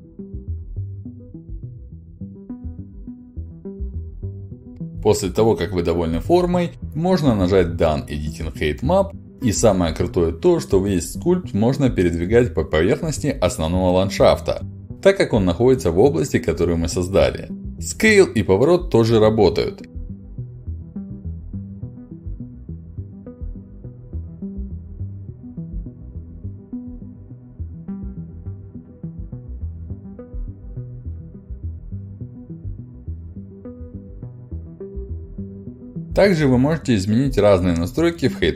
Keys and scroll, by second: 36.6 ctrl+alt+d.